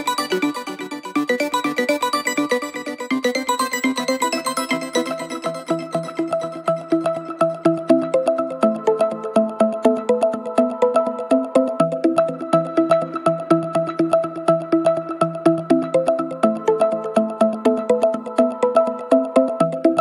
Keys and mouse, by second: 3.5 middle click, 4.3 middle click, 5.0 middle click, 5.3 middle click, 6.7 middle click, 6.9 middle click, 10.9 middle click, 11.4 middle click, 11.7 middle click.